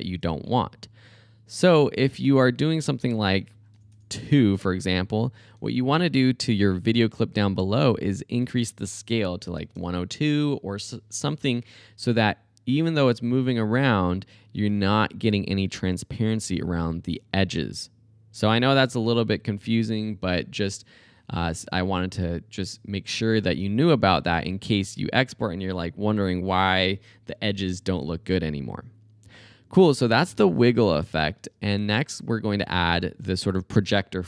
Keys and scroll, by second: 3.8 BackSpace, 4.3 2, 8.8-10.0 typing, 23.7 space, 31.4 space.